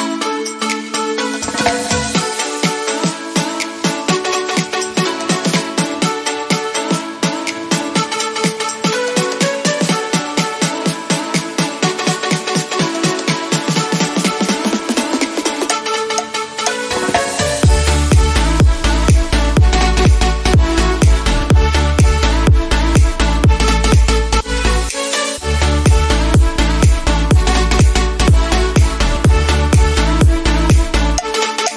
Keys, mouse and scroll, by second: 3.0-5.1 drag, 5.1 alt+scroll down 1, 5.8-6.5 typing, 6.5-8.4 drag, 9.2-10.6 typing, 10.7 click, 12.7 alt+scroll down 1, 14.2 click, 18.1 alt+scroll up 1, 20.2-22.2 typing, 21.9-25.2 drag, 25.2 alt+scroll down 1, 27.4 scroll down 1, 28.4 alt+scroll down 1, 28.6 click.